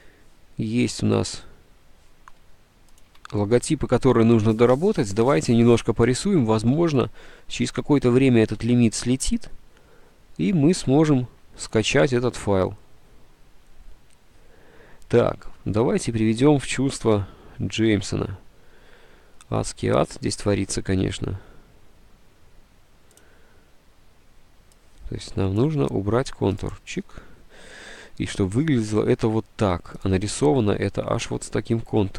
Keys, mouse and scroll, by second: 3.2 ctrl+s, 6.9 alt+Tab, 7.0 ctrl+s, 10.9 alt+Tab, 10.9 alt+Tab.